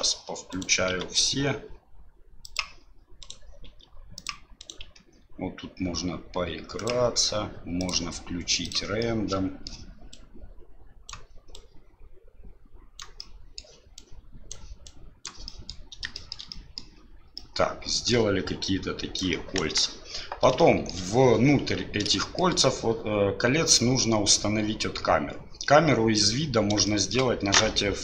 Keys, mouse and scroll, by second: 0.5 right click, 0.9 s, 3.2 right click, 3.7 s, 4.6 right click, 4.8 s, 7.8 click, 9.0 middle click, 10.1 right click, 11.6 right click, 13.3 middle click, 14.0 right click, 14.9 right click, 15.5 middle click, 16.1 shift+middle click, 16.5 middle click, 17.5 middle click, 18.6 right click, 19.6 KP_1, 20.7 shift+middle click, 22.3 middle click, 26.9 shift+middle click.